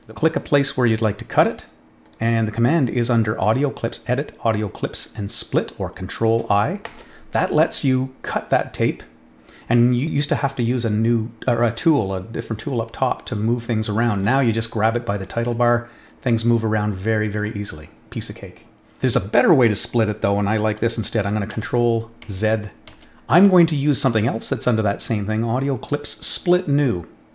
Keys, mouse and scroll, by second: 2.0 click, 6.8 click, 7.5 click, 13.3-14.1 drag, 15.5-17.3 drag, 22.2 ctrl+z, 24.0 click.